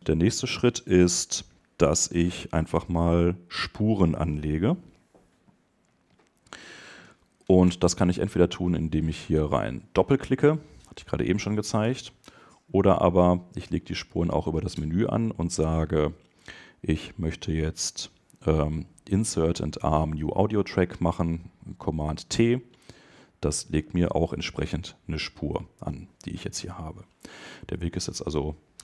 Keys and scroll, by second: 11.8 BackSpace.